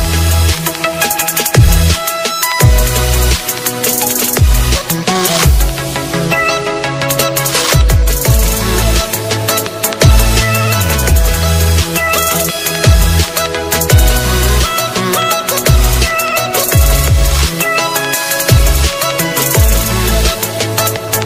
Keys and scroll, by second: 3.0 ctrl+space, 5.8 alt+space, 7.1 ctrl+space.